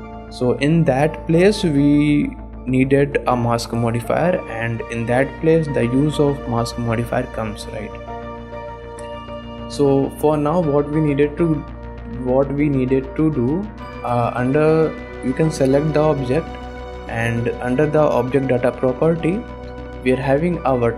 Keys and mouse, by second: 0.3 click, 0.8 click, 8.5 shift+click, 9.4 ctrl+Tab, 19.2 click.